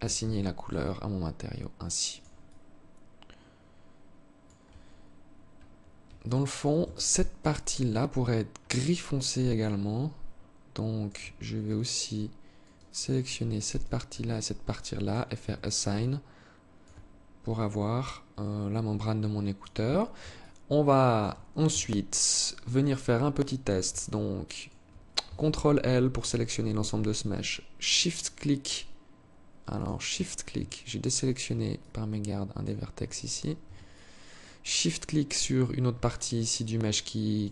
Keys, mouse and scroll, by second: 0.2 alt+click, 1.9 alt+click, 5.7 alt+click, 6.3 Tab, 6.8 right click, 8.3 alt+click, 12.1 alt+right click, 13.1 shift+right click, 14.5 click, 14.9 Tab, 15.4 alt+click, 16.9 alt+click, 19.3 alt+shift+click, 19.8 alt+click, 21.1 Tab, 23.4 alt+click, 25.5 ctrl+l, 27.3 shift+right click, 29.2 shift+right click, 31.2 alt+click, 32.7 shift+right click, 33.3 alt+click, 36.8 shift+right click.